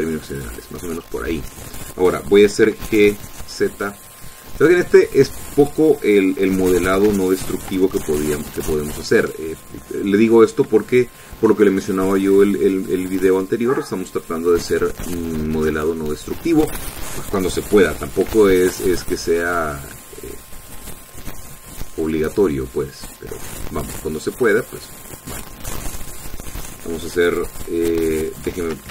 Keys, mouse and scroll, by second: 0.6 s, 2.4 click, 2.7 middle click, 3.6 g, 4.4 z, 6.5 click, 8.0 g, 8.6 x, 11.3 shift+click, 19.0 ctrl+r, 19.9 scroll up 2, 20.4 scroll up 2, 21.6-22.3 scroll up 4, 23.0 click, 23.9 click, 26.2-28.1 drag.